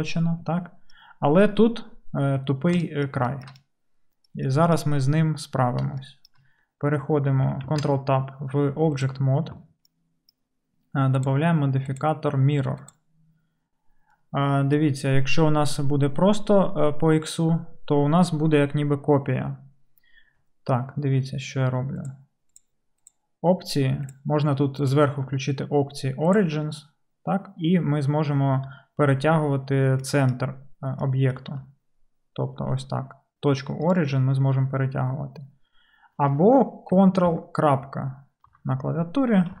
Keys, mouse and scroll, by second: 7.7 ctrl+Tab, 11.3 click, 22.7 click, 24.2 click, 31.6 g, 34.0-39.6 drag, 37.3 ctrl+., 38.5 ctrl+..